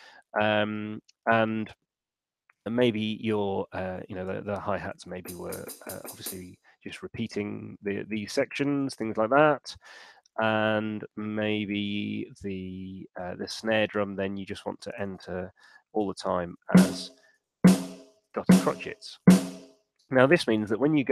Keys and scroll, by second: 4.4 5, 5.0 d, 7.2 Escape, 8.8 shift+r, 15.0-19.0 typing, 19.4 Home.